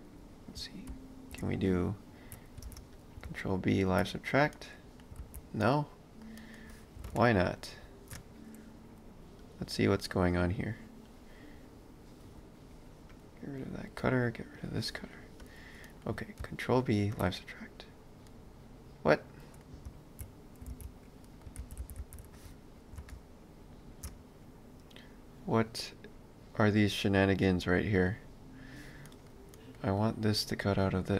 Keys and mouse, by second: 0.0 click, 0.9 shift+x, 1.6 click, 2.6 ctrl+space, 3.0 click, 3.3 ctrl+b, 4.5 middle click, 5.2 ctrl+z, 5.6 middle click, 7.1 ctrl+alt+shift+space, 9.5 click, 15.8 middle click, 16.4 ctrl+b, 18.3 middle click, 19.9 ctrl+b, 21.2 middle click, 21.7 ctrl+z, 23.1 ctrl+alt+shift+space, 25.5 click, 29.0 middle click, 30.0 click.